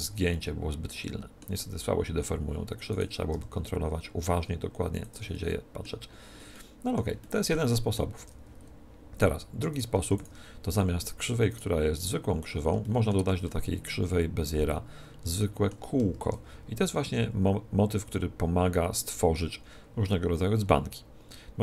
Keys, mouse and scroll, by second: 0.0-1.7 drag, 1.7-2.8 middle drag, 2.8-4.7 right drag, 3.2 g, 5.0-6.9 drag, 5.2 middle click, 6.7-9.5 middle drag, 8.1 Tab, 9.6-12.7 right drag, 9.9 x, 12.7-15.2 middle drag, 13.0 right click, 16.0 shift+a, 20.0-21.6 middle drag.